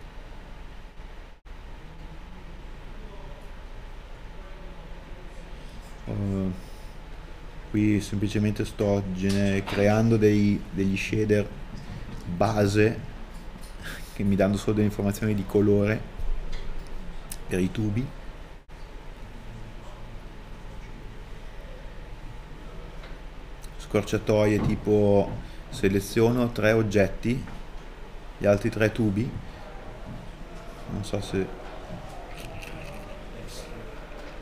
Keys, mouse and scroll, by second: 4.1 scroll up 1, 19.3 scroll up 1, 20.6 middle click, 22.0 scroll up 1, 30.5 scroll down 1, 32.4 middle click.